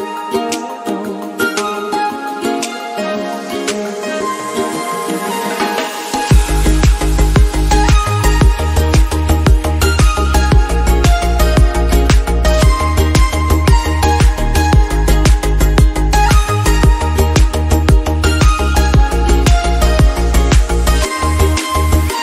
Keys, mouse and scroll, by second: 0.0-0.3 scroll down 3, 0.3-1.0 shift+middle drag, 1.0-1.6 scroll up 2, 1.6 scroll down 1, 1.8 middle click, 2.1 scroll up 2, 2.4 KP_0, 3.5 click, 4.0 KP_Decimal, 4.7-6.2 middle drag, 6.2 g, 7.4 click, 7.8-8.4 shift+middle drag, 8.4 scroll down 4, 8.6-9.3 shift+middle drag, 9.3 scroll down 1, 9.5-10.3 scroll up 5, 10.0 shift+middle drag, 10.4 click, 10.8 g, 11.4 s, 12.0 click, 12.2-12.5 scroll down 4, 12.6-13.0 shift+middle drag, 13.0 scroll up 2, 13.3-14.6 shift+middle drag, 14.6 click, 15.0 g, 16.1 click, 16.6 click, 16.7-17.1 scroll up 2, 17.1-17.5 shift+middle drag, 17.5 click, 18.0 g, 19.3 click, 20.0 g, 21.5-21.9 middle drag, 21.9-22.2 scroll up 11.